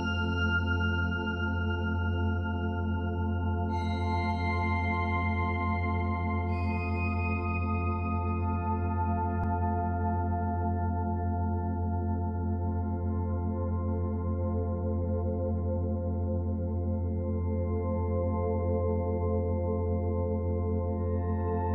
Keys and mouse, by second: 1.6 click, 2.7 click, 3.6-4.1 drag, 4.9 click, 5.6-6.1 drag, 6.1 typing, 7.2-7.7 ctrl+alt+drag, 9.9 ctrl+alt+click, 10.5-14.0 ctrl+alt+drag, 14.3-15.2 drag, 15.2-16.1 drag, 16.4 click, 17.9 click, 20.0 typing.